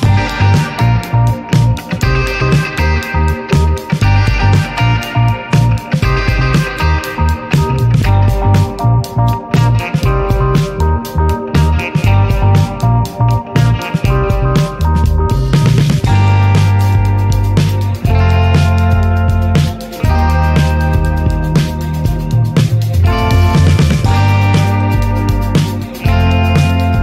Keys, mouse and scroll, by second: 0.2 shift+a, 1.7-2.2 scroll up 5, 2.0 middle click, 2.2 Tab, 3.1 m, 4.8 click, 5.1 alt+middle click, 5.4 middle click, 5.7 alt+z, 6.0-6.3 scroll up 3, 6.3 middle click, 7.3 shift+middle click, 7.8 e, 10.6-12.5 scroll up 14, 10.9 shift+middle click, 11.4 shift+middle click, 11.9 shift+middle click, 12.5 shift+middle click, 13.0-13.5 scroll up 7, 13.5-14.8 shift+middle drag, 14.8 e, 15.9 shift+middle click, 16.5 e, 17.2 e, 18.7 e, 19.6 scroll down 3, 19.8 shift+middle click, 20.2 e, 22.4-22.8 scroll down 11, 22.8 shift+middle click, 23.0 scroll up 2, 23.4 click, 24.2 scroll down 2, 24.4 shift+middle click, 24.7 e, 26.1 Tab, 26.5 Tab.